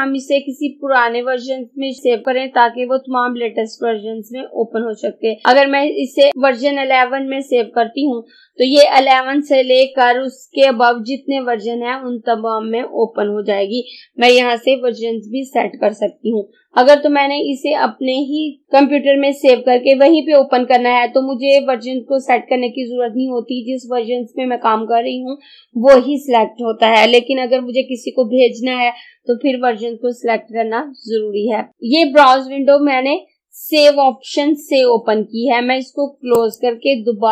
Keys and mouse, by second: 36.4 click.